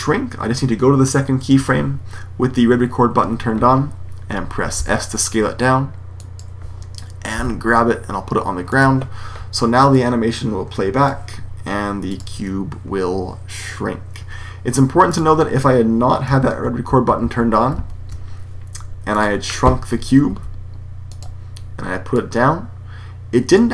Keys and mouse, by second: 0.4-2.3 drag, 4.7 s, 6.3-7.2 drag, 7.2 g, 9.9-10.6 drag, 14.1 Escape, 16.3 z, 16.8 z, 17.1 z, 19.0-19.5 drag, 20.2 s.